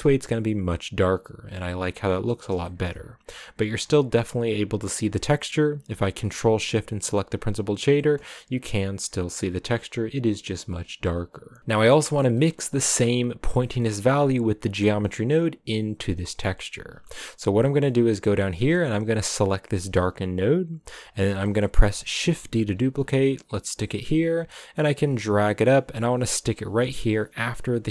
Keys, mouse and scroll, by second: 1.4-2.0 scroll up 4, 2.0-2.6 scroll down 1, 2.6-3.8 shift+middle drag, 3.8 scroll down 2, 6.5 ctrl+shift+click, 7.9 shift+middle click, 8.2 scroll up 3, 9.1 scroll down 7, 11.1 scroll up 1, 19.2-22.2 drag, 22.2 shift+d, 24.0-25.1 middle drag, 25.1-25.6 scroll down 1, 25.6 g.